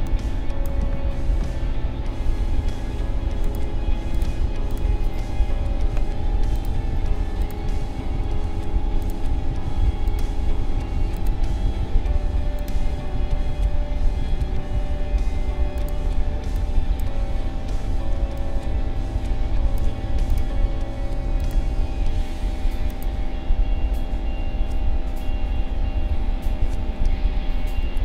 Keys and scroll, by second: 5.9 Delete, 18.1 space.